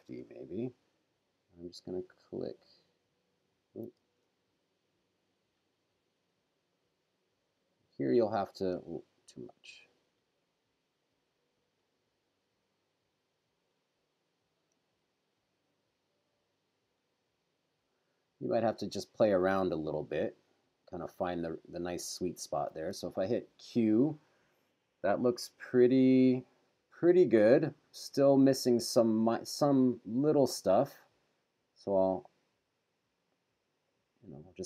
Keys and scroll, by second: 0.1 Return, 4.0 super+z, 8.8 super+z, 14.8 super+z, 22.8 q, 29.8 q.